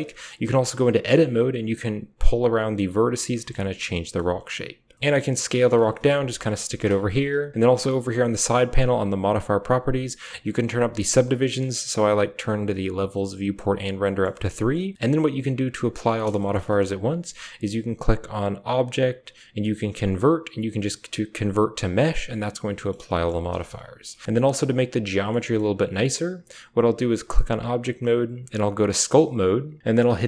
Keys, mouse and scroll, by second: 0.4 Tab, 1.2 g, 2.8 g, 3.2 Tab, 3.4-3.8 drag, 5.0-7.2 typing, 9.0 drag, 10.8 drag, 14.2 middle drag, 22.7 middle click, 23.1 Tab, 23.4 shift+middle click, 23.6 Tab, 24.2-25.2 middle drag, 27.2-29.1 drag.